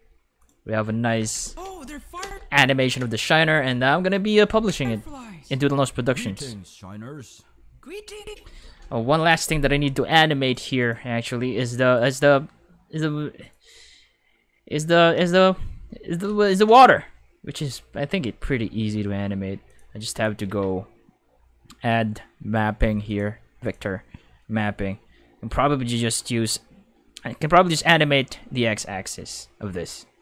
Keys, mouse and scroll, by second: 0.4 click, 1.4 space, 2.2 space, 2.8 space, 4.6 space, 8.1 space, 8.3 5, 10.4 click, 10.8 click, 11.9 right click, 13.4 click, 15.1 space, 15.3 5, 16.2 space, 16.4 5, 19.6 click, 19.9 click, 20.2-21.1 typing, 23.1 click, 23.6 click.